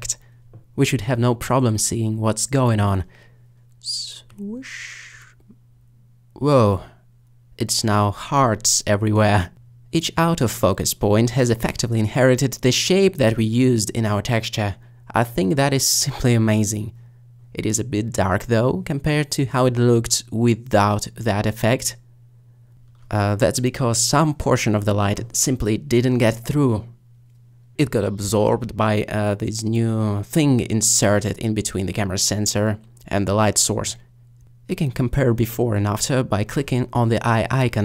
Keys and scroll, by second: 2.4 alt+shift+s, 19.9 alt+s.